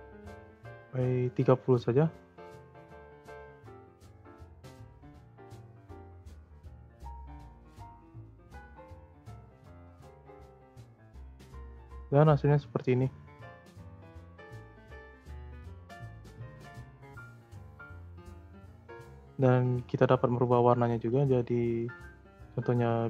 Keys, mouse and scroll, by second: 2.3 click, 6.1-9.1 drag, 12.0-13.2 drag, 13.2 space, 14.1 space, 14.8-16.2 drag, 16.2 space, 17.4 space, 18.0-21.0 drag, 21.0 click.